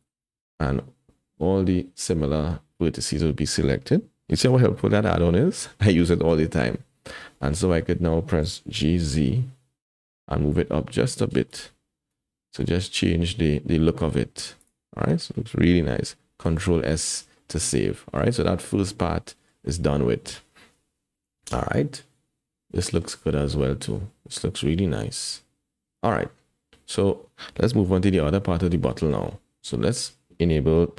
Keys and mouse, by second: 0.1 alt+z, 0.6-3.5 middle drag, 6.3 KP_1, 7.4 shift+middle click, 8.8 g, 12.0 Tab, 12.6 alt+z, 14.6 click, 16.5 ctrl+s, 17.4-18.2 drag, 18.9 click, 21.2 KP_7, 22.8 click, 22.8 middle click, 27.9 KP_1, 28.9 shift+middle click, 29.9 Tab.